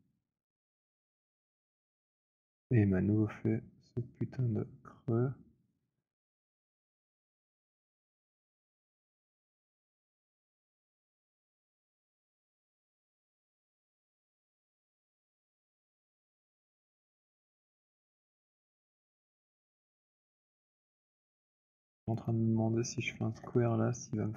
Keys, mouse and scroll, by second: 0.3 click, 1.7 alt+click, 2.1 scroll, 2.2 middle click, 3.9 middle click, 4.5-5.0 scroll, 5.6 alt+click, 10.2 alt+click, 11.0 click, 19.0 alt+click, 21.2 click, 22.0 click, 22.3 alt+click, 23.3 ctrl+h.